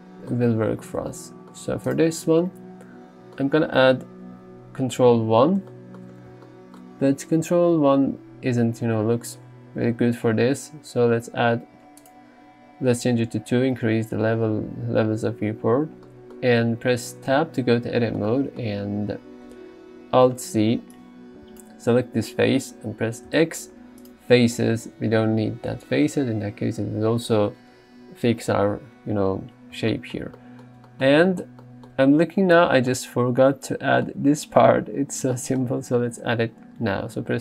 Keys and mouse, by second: 5.1 ctrl+1, 12.1 click, 16.1 middle click, 17.5 Tab, 20.3 alt+z, 21.0 click, 23.3 x, 24.6 alt+z, 24.9 Tab, 31.2 shift+middle drag.